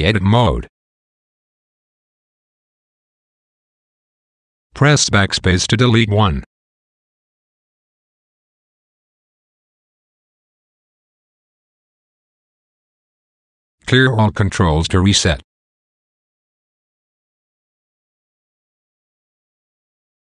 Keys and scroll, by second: 1.9 b, 5.6 BackSpace, 8.0 BackSpace, 10.1 shift+super+k.